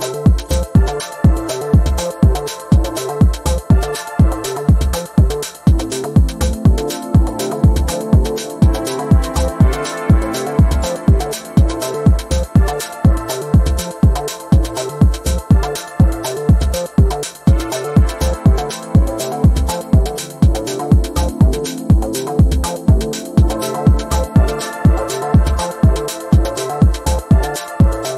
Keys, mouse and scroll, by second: 0.1-1.0 ctrl+scroll up 2, 1.0-1.6 ctrl+scroll up 1, 1.6-3.0 ctrl+scroll down 2, 3.0-3.6 ctrl+scroll down 1, 3.7-4.2 ctrl+scroll up 2, 4.2-4.8 ctrl+scroll up 1, 5.2-6.2 ctrl+drag, 6.8 ctrl+scroll down 1, 8.1-9.6 drag, 10.2-10.8 ctrl+scroll up 1, 11.3-11.9 ctrl+scroll down 1, 12.4 Return, 13.4 click, 19.1 click, 19.7 ctrl+scroll up 1, 20.4-24.6 drag, 24.9-25.2 ctrl+scroll up 1, 26.2-28.1 drag.